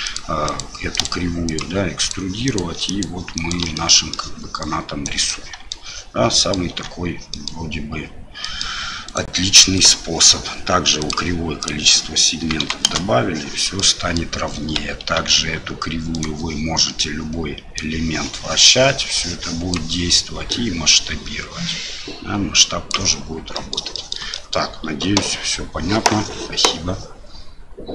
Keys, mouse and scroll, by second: 0.5 ctrl+click, 1.0 ctrl+click, 2.9 ctrl+click, 3.4 ctrl+click, 3.7 middle click, 4.6 click, 5.1 right click, 5.4 middle click, 6.4 middle click, 6.7 Tab, 7.3 middle drag, 8.4 middle drag, 9.1 click, 9.7 click, 11.0 click, 11.6-13.3 drag, 13.8-14.1 middle drag, 15.2 Tab, 16.1 click, 17.9-19.7 drag, 20.5-22.9 drag, 23.5 middle drag, 23.9 shift+middle drag, 24.3 middle drag.